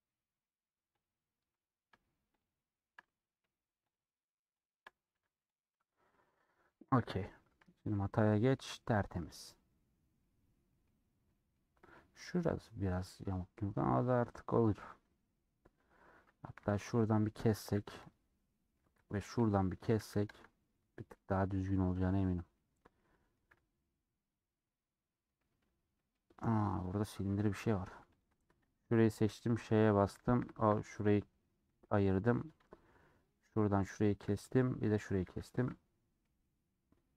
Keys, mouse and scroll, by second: 0.9 click, 1.2-2.4 scroll up 2, 2.4 shift+click, 2.7 shift+middle click, 3.3 scroll down 1, 3.8 shift+click, 5.1 a, 7.2 middle click, 7.7 z, 8.3 scroll down 3, 8.5 middle click, 9.0-9.4 scroll down 2, 9.4-13.7 middle drag, 13.7-14.0 scroll up 1, 14.0 middle click, 15.0 click, 15.1 middle click, 15.7-16.5 scroll up 1, 16.5-16.9 scroll up 1, 16.9 alt+click, 17.7 a, 18.5 middle click, 19.4 alt+click, 20.0 a, 20.7-22.8 middle drag, 22.8 scroll down 1, 22.9 middle click, 23.7 Tab, 23.7-25.8 middle drag, 25.8 Tab, 25.9 middle click, 26.3-26.7 scroll up 3, 26.7 scroll down 1, 27.5 3, 28.3 alt+Left, 29.3 ;, 30.4 alt+shift+Left, 31.4-32.5 middle drag, 32.5 click, 34.0 2, 35.2 a, 35.7 u, 36.7 middle click.